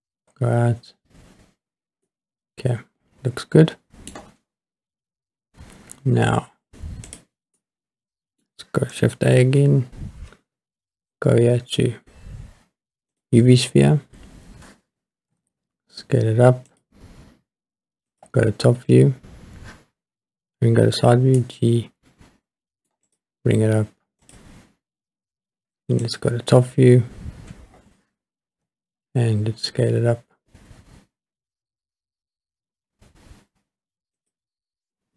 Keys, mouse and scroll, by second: 2.1-4.1 middle drag, 7.1 click, 7.6-8.4 middle drag, 9.4 shift+a, 15.3 s, 16.7 click, 18.1 click, 21.0 g, 21.4 middle click, 23.1 click, 24.2 click, 26.0 click, 26.6-27.0 scroll down 2, 27.4-28.5 scroll up 4, 28.5 s, 34.2 click.